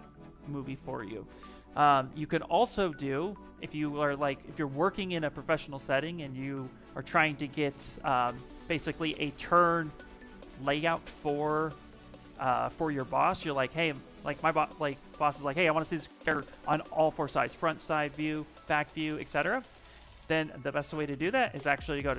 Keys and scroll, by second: 4.2 shift+Caps_Lock, 13.0 ,.